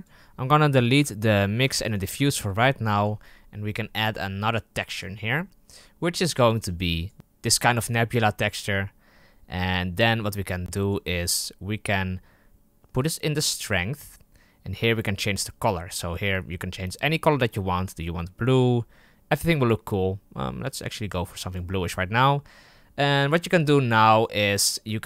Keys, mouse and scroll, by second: 1.4 Delete, 1.7 click, 1.9 Delete, 2.5 click, 5.1-6.6 drag, 10.2-14.9 drag, 23.8 click.